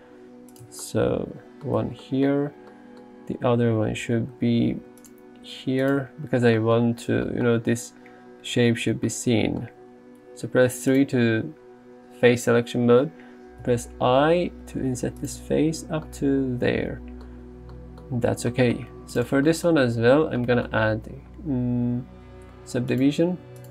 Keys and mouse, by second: 0.6 click, 0.7 Tab, 1.8 Tab, 4.7 ctrl+r, 5.1 click, 6.1 Tab, 8.9 Tab, 10.8 3, 13.7 i, 15.4 Tab, 23.0 click.